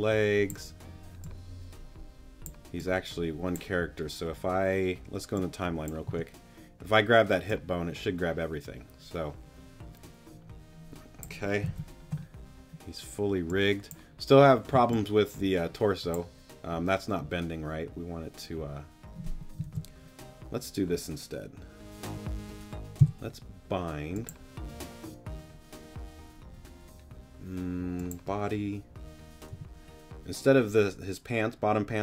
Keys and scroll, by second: 6.1 t, 11.7 super+z, 14.7 z, 19.6 super+z, 23.0 b, 29.5 g.